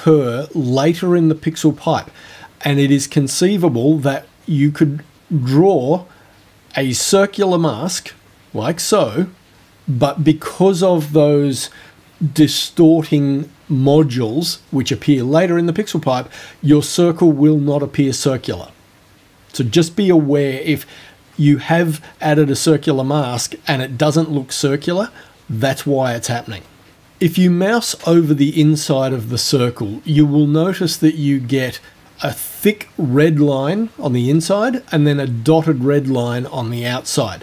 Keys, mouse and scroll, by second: 7.1 click.